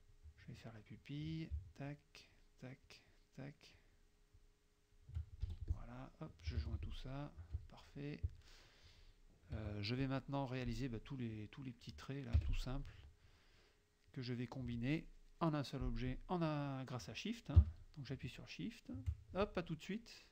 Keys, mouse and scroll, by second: 1.0 click, 1.9 shift+click, 2.9 shift+click, 3.8 shift+click, 4.4 shift+click, 5.5 shift+F2, 5.7 shift+click, 6.7 shift+j, 6.9 shift+click, 7.5 F1, 9.6 KP_Subtract, 9.9 click, 12.4 F6.